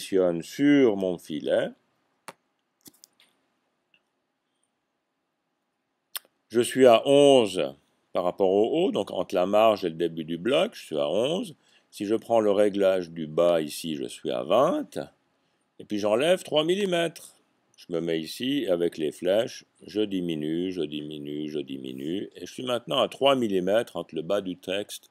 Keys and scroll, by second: 19.2 Down, 20.5-21.3 typing, 24.4 typing.